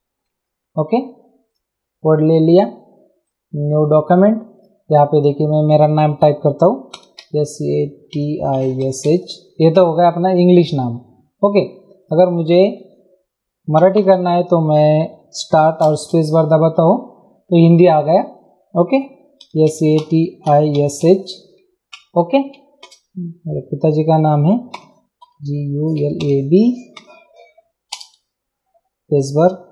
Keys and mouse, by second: 1.5 click, 3.2 click, 4.6 click, 6.7-9.5 typing, 10.2 Return, 12.0 click, 12.8 BackSpace, 15.8 super+space, 18.4 click, 19.4-21.5 typing, 21.9 Return, 22.8 space, 24.7-27.9 typing.